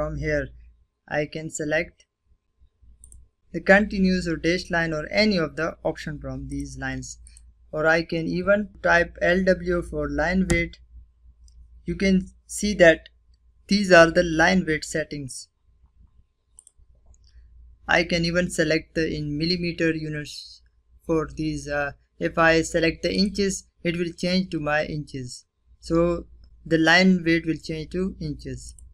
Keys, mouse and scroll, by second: 1.8 click, 5.3 click, 7.2 click, 9.3 Return, 12.4-14.3 scroll down 1, 14.3-14.9 scroll up 2, 15.4 click, 21.9 click, 23.5-25.9 scroll down 1, 27.5 click.